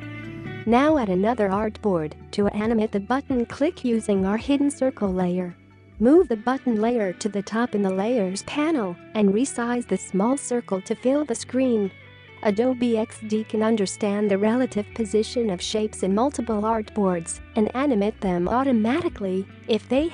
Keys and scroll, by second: 2.5 4, 2.8 Return, 19.7-20.1 space.